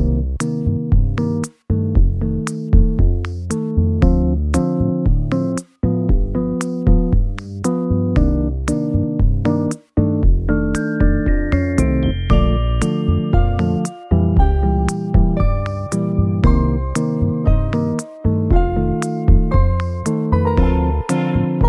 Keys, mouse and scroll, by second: 0.6 KP_0, 0.6 Return, 1.9 s, 3.5 g, 6.4 KP_7, 7.5 r, 8.7 g, 9.8 r, 10.6 g, 12.6 s, 14.5 KP_0, 17.1 g, 19.2 x, 20.8 KP_7.